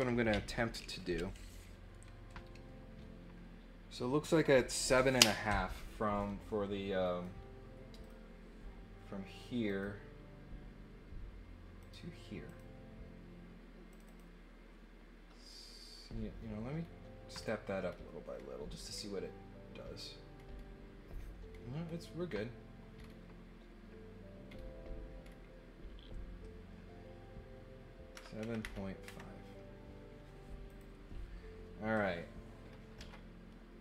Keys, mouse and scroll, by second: 7.0 right click, 8.0 click, 9.6 click, 11.8 click, 12.4 click, 13.9 click, 14.0 click, 16.8 scroll up 1, 17.4-17.9 scroll up 2, 17.8 middle click, 18.3 middle click, 18.9 middle click, 20.3 middle click, 20.5 middle click, 21.5 middle click, 21.8 middle click, 22.2 middle click, 22.9 middle click, 24.4 middle click, 24.5 middle click, 25.2 middle click, 30.6 click.